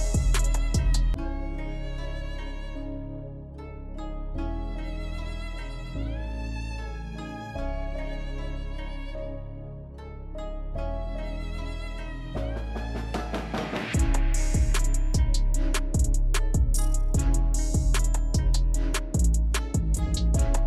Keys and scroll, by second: 0.6 ctrl+shift+c, 3.4 Delete, 5.5 ctrl+-, 5.8 ctrl++, 10.5 Down, 10.7 Down, 11.2 Down.